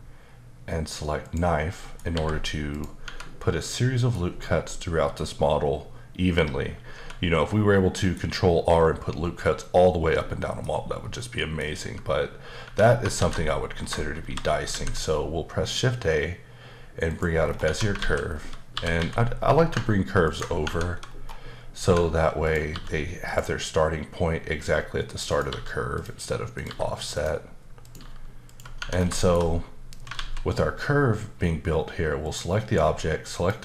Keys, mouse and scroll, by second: 1.2 click, 1.7 middle click, 2.1 h, 2.7 click, 3.0 Tab, 3.6 middle click, 4.7 middle click, 7.0 Tab, 7.9 middle click, 10.2 middle click, 11.0-11.4 scroll down 1, 11.4 middle click, 11.8 Tab, 12.6 Tab, 13.2 alt+a, 13.7 scroll down 1, 14.2 shift+c, 17.1 click, 17.4 scroll down 3, 17.6 Tab, 18.0 alt+z, 18.2-18.7 scroll down 2, 18.7 typing, 20.2 ctrl+click, 20.6 Tab, 21.1-21.9 scroll up 2, 21.9 Tab, 22.4 click, 22.7 g, 23.3 click, 25.3 click, 25.5 g, 25.9 click, 26.5 click, 26.6 g, 27.1 click, 27.8 click, 28.0 g, 28.5 click, 28.8 Tab, 28.9 scroll down 1, 29.1 shift+middle click, 30.1 alt+z, 32.2 click, 33.3 shift+click.